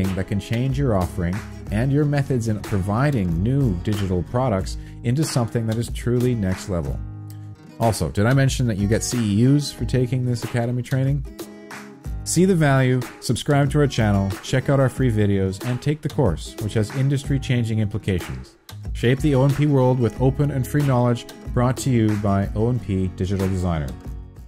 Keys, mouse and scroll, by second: 0.0-2.0 typing, 3.7 y, 4.4 y, 4.8 y, 5.3 y.